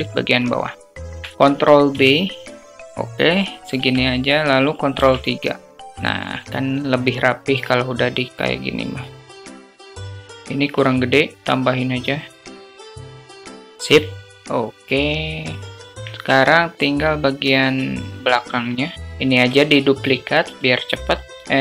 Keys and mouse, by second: 0.0 alt+click, 1.7 ctrl+b, 3.6 Tab, 5.1 ctrl+3, 5.9 `, 8.3 s, 9.4 click, 9.7 click, 10.5 s, 12.5 click, 12.7 click, 13.2 click, 13.5 click, 14.0 middle drag, 14.7 click, 17.7-18.2 alt+middle drag, 18.2 alt+drag, 18.8 click, 19.7 shift+d, 21.4 r.